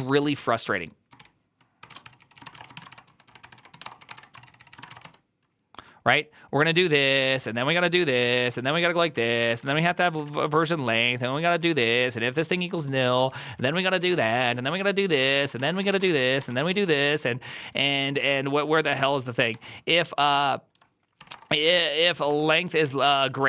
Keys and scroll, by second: 0.0-5.6 typing, 6.8-23.4 typing, 22.7 Tab, 23.0 ctrl+c, 23.1 ctrl+c.